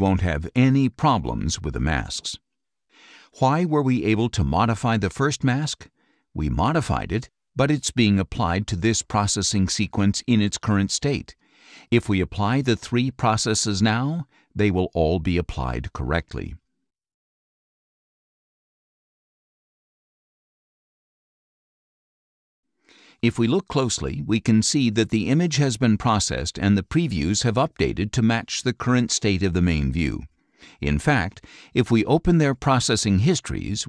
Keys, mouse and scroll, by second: 5.6 click, 8.3 click, 9.4 click, 14.1-18.6 drag, 22.8 click, 26.7-30.3 drag, 31.8 right click, 33.3 click.